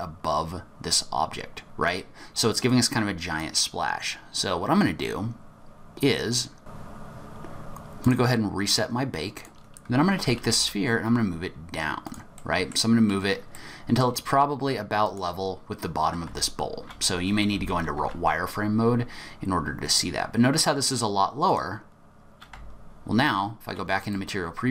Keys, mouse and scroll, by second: 2.8 click, 4.5-5.0 scroll down 4, 5.0-5.7 scroll up 3, 5.7-6.8 scroll up 2, 7.3-8.2 scroll up 12, 7.6 click, 9.3 click, 10.2 g, 12.4 middle click, 12.9-13.2 scroll up 2, 13.5 middle click, 15.0 click, 16.3 z, 17.5 g, 22.5 z, 24.1 middle click.